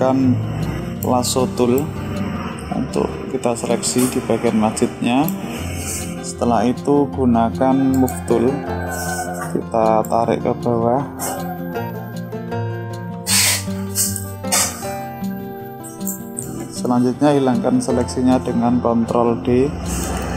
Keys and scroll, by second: 18.3 ctrl+d.